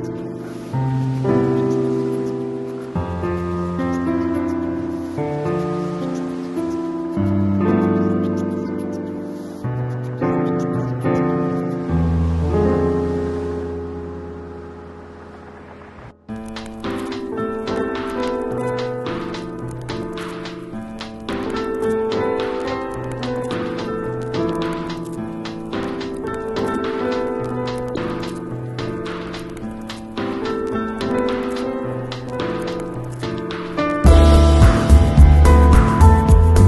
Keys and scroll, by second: 4.6 Return, 5.3 z, 6.2 space, 9.0 b, 12.4 ], 16.3 [, 17.5 [, 18.7 3, 22.0 0, 22.7 ], 23.7 ], 27.6 [, 30.0 [, 36.0 v.